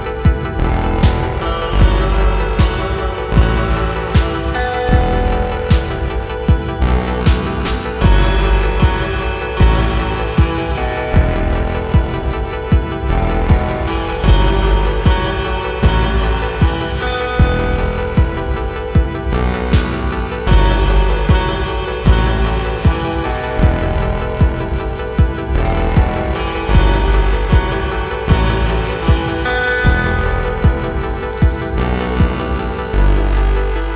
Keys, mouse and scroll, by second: 0.7-3.3 alt+drag, 3.6 alt+middle click, 4.3-6.4 drag, 6.8-7.9 drag, 8.2 click, 8.7 alt+middle click, 9.3-10.4 drag, 10.7 alt+middle click, 11.4 click, 12.0 click, 12.8 click, 13.6 click, 14.6-16.5 drag, 16.9 alt+middle click, 17.6-18.8 drag, 19.0 alt+middle click, 19.6-21.8 drag, 22.0 alt+middle click, 22.6-23.9 drag, 24.2-25.5 drag, 25.7-26.2 scroll up 4, 26.4 alt+click, 26.7 alt+click, 27.0 alt+click, 27.2 alt+middle click, 27.5 scroll down 2, 27.8 shift+right click, 28.6-29.0 scroll down 3, 29.0 alt+middle click, 29.3 scroll up 2, 30.1 click, 30.5-33.9 drag.